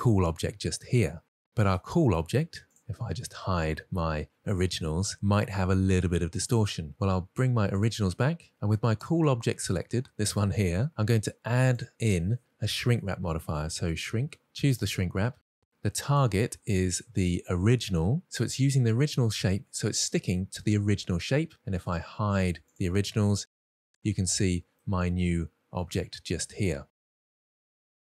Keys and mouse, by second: 0.4 click, 3.2 middle click, 3.9 click, 5.6 click, 6.2-6.6 middle drag, 6.9 ctrl+z, 8.4 click, 9.6-10.7 drag, 12.1-15.3 drag, 16.5 click, 18.0 click, 19.5-20.1 middle drag, 20.5 middle drag, 24.1 click, 24.5-25.0 middle drag, 26.4 drag, 26.8 Tab, 27.2-27.9 middle drag.